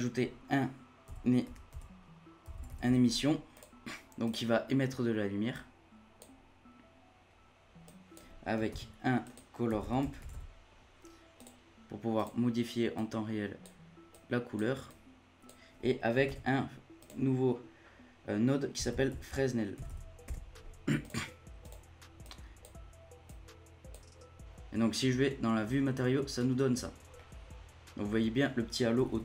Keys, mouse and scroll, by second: 4.5-5.4 scroll up 6, 5.5-7.2 drag, 7.2-7.8 scroll down 1, 7.8 click, 8.7 shift+a, 12.9-16.3 drag, 16.3 shift+a, 22.2-26.2 drag, 26.2-27.1 scroll down 1, 27.1-28.9 middle drag, 28.9 a, 29.1 a.